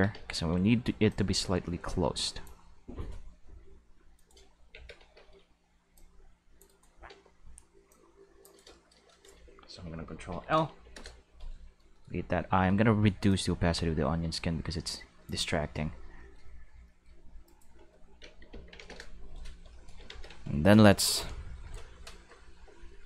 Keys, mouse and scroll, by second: 0.1 c, 1.1-2.4 drag, 4.1-4.5 right drag, 4.7 alt+a, 5.0 c, 5.9-6.6 drag, 6.7 right click, 7.1 c, 7.9-8.4 drag, 8.4 right click, 8.8 shift+middle click, 10.3 ctrl+l, 10.7 x, 10.9 Return, 12.0 middle click, 13.3-15.2 drag, 17.5 click, 17.5 right click, 18.5 ctrl+l, 18.8 x, 20.1 ctrl+s.